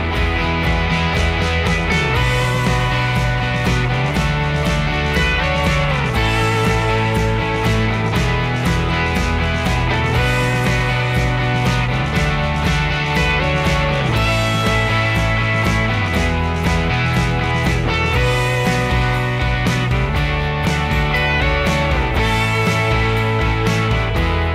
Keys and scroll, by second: 3.9-6.4 typing, 6.8 ctrl+g, 8.3 m, 10.9-12.4 typing, 18.5 p, 20.5 ,, 21.4 3, 21.5 Return.